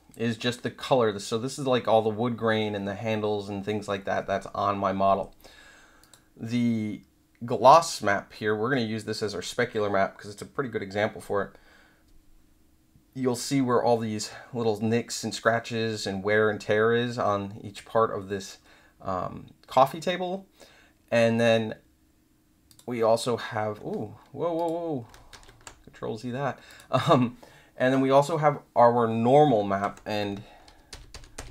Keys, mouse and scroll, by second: 6.0 click, 22.6 click, 24.5 click, 25.3 ctrl+z, 26.6 click, 30.9 ctrl+=.